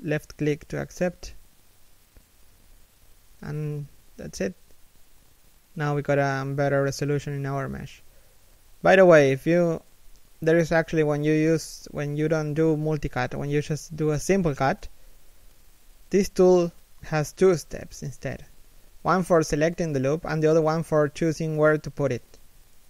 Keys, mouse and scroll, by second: 4.4 middle click, 5.4 KP_1, 8.6 a, 10.4 shift+middle click, 11.7 KP_3, 12.1 KP_1, 12.7 shift+middle click, 14.7-15.2 scroll up 1, 15.8 k.